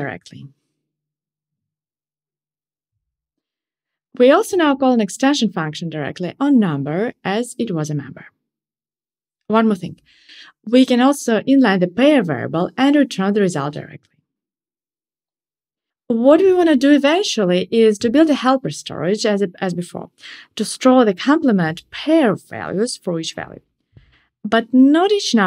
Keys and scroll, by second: 10.5 alt+super+n.